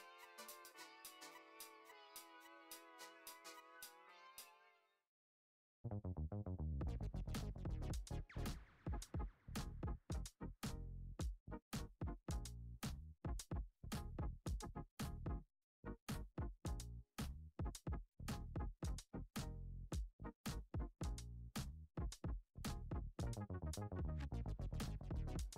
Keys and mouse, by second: 0.9 shift+middle click, 1.5 middle click, 2.0 ctrl+r, 5.5 click, 5.5 ctrl+alt+shift+z, 5.6 alt+shift+click, 5.9 alt+shift+click, 6.5 g, 10.1 click, 11.2 shift+click, 11.9 ctrl+b, 13.7 middle click, 15.2 click, 16.0 click, 16.7 click, 18.3 middle click, 19.0 e, 20.2 shift+middle click, 20.7 g, 24.3 ctrl+Tab, 24.8 click, 25.2-25.5 middle drag.